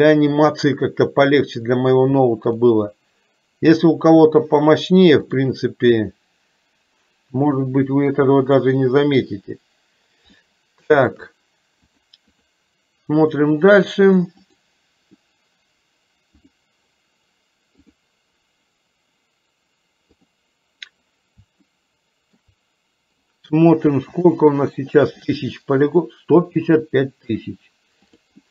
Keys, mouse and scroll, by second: 5.4-9.4 drag, 10.5 shift+middle click, 12.1 click, 13.4 click, 14.6-16.7 drag, 17.9-20.5 drag, 21.7 shift+middle click, 24.2 click, 26.8 middle click, 28.2 click.